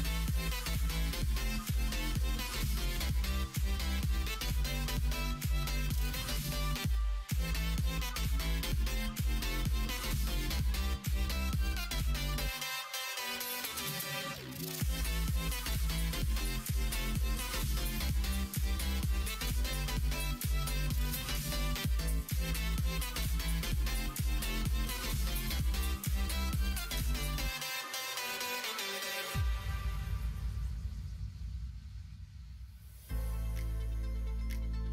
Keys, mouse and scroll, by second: 6.8 e, 12.3 s, 14.3 s, 17.2 g, 32.7 ctrl+z, 33.3 ctrl+z.